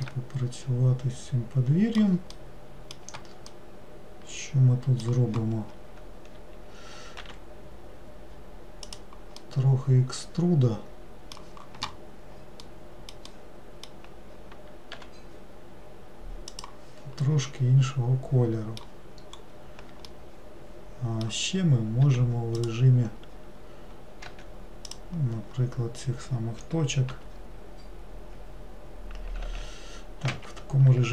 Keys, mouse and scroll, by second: 9.6-12.6 middle drag, 12.8-15.1 middle drag, 15.1 g, 17.4-19.5 middle drag, 19.5-20.3 scroll up 3, 20.3-22.2 middle drag, 22.2 2, 22.7 click, 25.0 click.